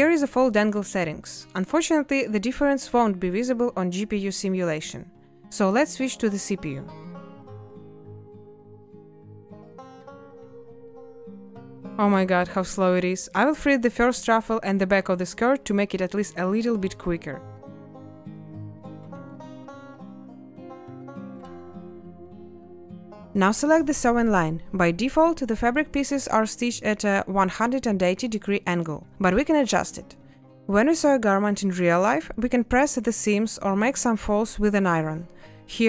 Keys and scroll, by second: 5.3 8, 5.4 0, 5.5 Return, 17.2 a, 21.3 ctrl+space, 23.9 b.